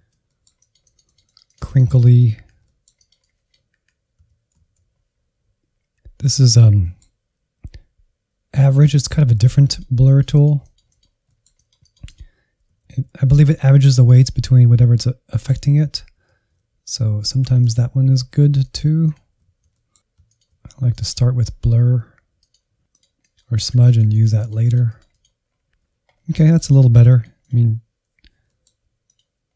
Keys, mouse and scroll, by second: 0.1 middle click, 0.3 click, 0.7 Insert, 1.3 alt+z, 1.9 alt+z, 2.1 click, 2.7 middle click, 3.1 click, 3.7 middle click, 4.1-6.3 drag, 6.3-8.2 middle drag, 8.2-9.5 drag, 9.5 middle click, 9.8 click, 10.7 alt+z, 11.8-13.2 ctrl+drag, 13.2 alt+z, 13.9 alt+z, 14.3 ctrl+click, 14.5 alt+z, 14.8 click, 15.5 alt+z, 15.7 middle click, 16.1 ctrl+click, 16.3 middle click, 16.6-17.9 drag, 18.3-20.2 drag, 20.2 f, 20.8-22.4 drag, 22.4 scroll down 2, 22.6 Insert, 22.8 middle click, 23.7 Right, 23.9 Left, 24.2 Right, 24.3 Right, 24.5 Right, 24.7 middle click, 25.0 Left, 25.2 Left, 25.6 Right, 25.7 Right, 26.0 scroll up 1, 26.3 middle click, 26.7 scroll up 1, 27.0-28.4 drag, 28.4 middle click, 29.0 click.